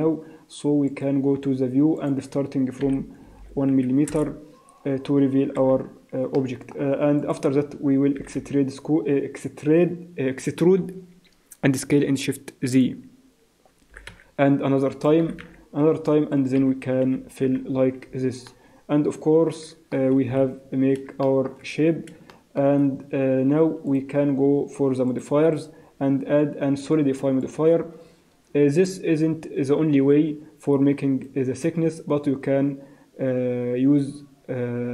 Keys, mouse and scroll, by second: 1.0 click, 2.0 click, 3.4 0, 5.5 n, 6.4 middle click, 7.3 alt+click, 8.2 e, 13.9 e, 15.2 e, 17.0 f, 17.5-18.5 scroll down 6, 17.7 Tab, 18.5 middle click, 20.3 KP_1, 20.5 scroll down 2, 21.2 shift+middle click, 21.6 scroll up 4, 22.3 shift+middle click, 23.9 click, 25.1 click, 25.5 click, 28.3 scroll down 1, 30.7 click.